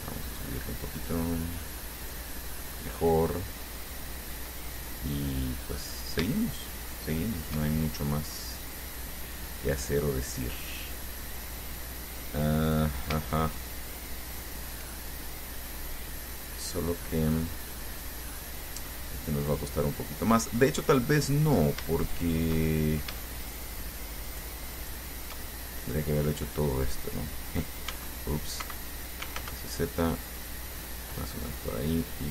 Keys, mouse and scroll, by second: 1.9-3.0 middle drag, 4.5-5.6 middle drag, 6.0 right click, 6.6 shift+right click, 7.3 shift+right click, 7.8 shift+middle click, 8.5-8.8 shift+scroll up 3, 8.9-13.3 drag, 13.8 shift+right click, 14.5 shift+right click, 16.2-17.9 drag, 18.2-19.3 drag, 20.1 click, 21.3 click, 22.4 shift+right click, 22.8 shift+middle click, 23.7 shift+right click, 24.5 shift+right click, 25.0 shift+right click, 25.7 shift+middle click, 28.1 s, 28.8 Escape, 29.5 z, 31.4 click.